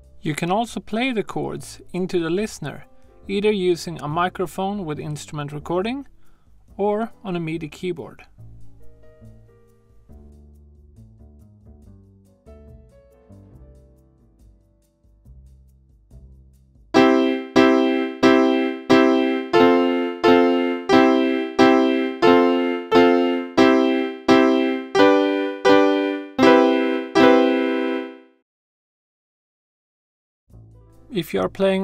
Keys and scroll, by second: 2.3 super+z, 15.1 super+k, 16.7-18.1 typing, 19.3-29.1 typing.